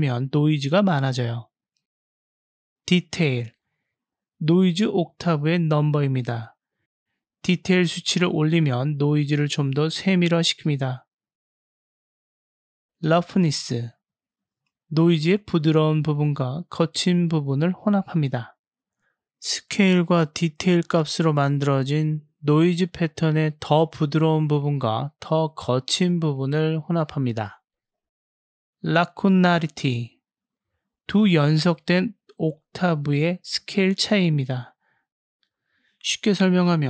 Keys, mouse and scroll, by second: 3.1-5.9 drag, 7.7-12.0 drag, 13.6-15.1 drag, 17.1-18.1 drag, 20.5-24.2 drag, 25.2 click, 27.1-28.3 drag, 29.1-32.2 drag, 35.6-36.8 drag.